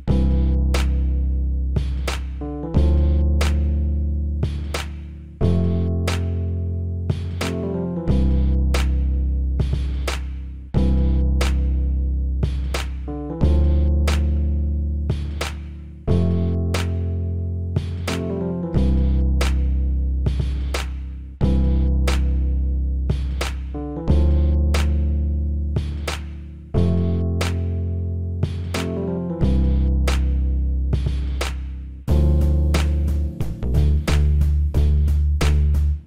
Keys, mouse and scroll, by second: 7.8-9.5 drag, 8.6 e, 11.1 click, 11.6 middle click, 12.8 middle click, 13.3 click, 15.1 KP_1, 17.0 e, 17.8-19.7 drag, 22.0 middle click, 23.1-24.1 middle drag, 24.1-25.1 drag, 25.1-28.6 middle drag, 28.6-30.5 drag, 30.8-33.4 drag, 34.6-36.0 middle drag.